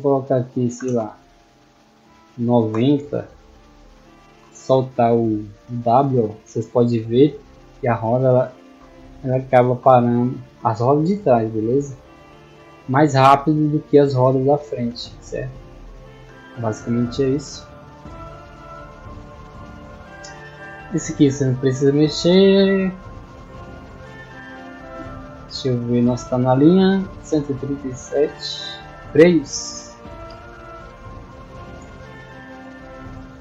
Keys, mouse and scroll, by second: 3.1-4.0 typing, 5.4 a, 9.7-11.4 typing, 16.6-17.2 scroll down 4, 17.5-18.7 middle drag, 19.0 middle click, 20.6 middle click, 21.9 middle click, 22.8 middle click, 24.3-24.8 scroll down 1, 24.8-25.6 scroll down 1, 27.9-28.2 scroll down 1, 28.8 scroll down 1, 29.6 middle click.